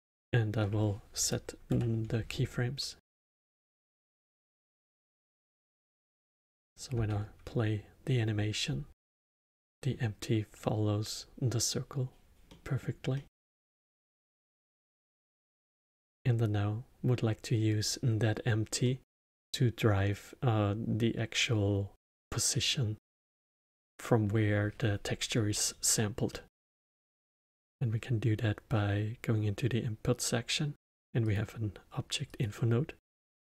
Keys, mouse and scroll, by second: 0.0 click, 1.6 shift+Right, 3.3-4.4 drag, 4.4 KP_0, 6.0 click, 6.6 middle drag, 6.9 space, 9.4-14.5 middle drag, 14.5 space, 14.9-17.7 middle drag, 17.7 click, 18.8-21.8 middle drag, 23.1-26.2 middle drag, 26.2-27.2 middle drag, 27.2 shift+a.